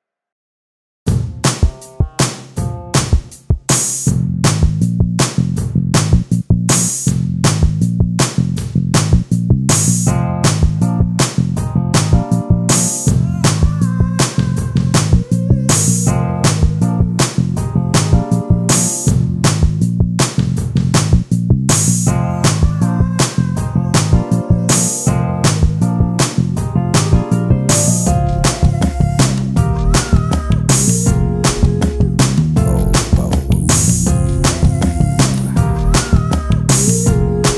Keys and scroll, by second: 2.0 space, 8.2 space, 8.9 e, 10.1 d, 11.5 ctrl+space, 14.7 ctrl+space, 15.9 l, 18.7 ctrl+space, 23.0 space, 25.3 ctrl+space, 30.1 t, 33.8 ctrl+space, 37.4 space.